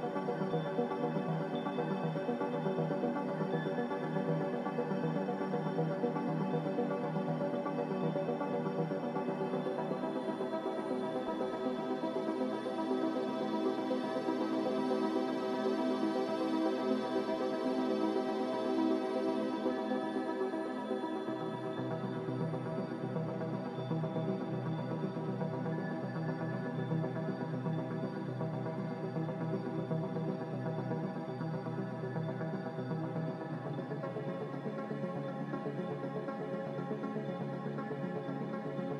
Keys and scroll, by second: 38.3 z.